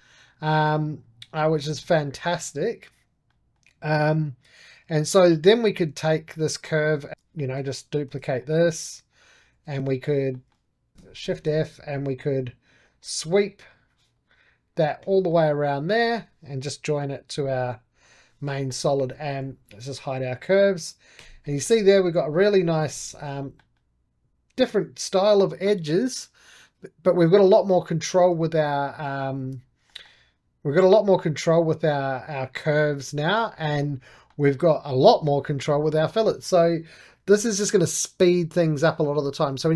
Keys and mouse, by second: 1.3-5.2 middle drag, 5.2 right click, 5.3 click, 5.8 3, 6.3 click, 7.1 2, 7.1 alt+shift+click, 7.3 middle click, 8.0 shift+d, 8.3 middle click, 9.0 click, 9.4 2, 9.8 click, 10.2 middle click, 10.9 Escape, 11.2 shift+f, 12.7-15.0 drag, 15.0 middle click, 15.8-17.3 right drag, 17.3 j, 17.9 click, 18.4 middle click, 18.7 2, 19.7-21.1 drag, 21.1 h, 21.4 middle click, 22.1 click, 22.8 alt+q, 23.3-26.1 middle drag, 27.9 shift+middle click, 28.3 middle click, 29.3 alt+q, 29.8-32.3 middle drag, 33.4-38.3 middle drag, 38.5-39.7 middle drag.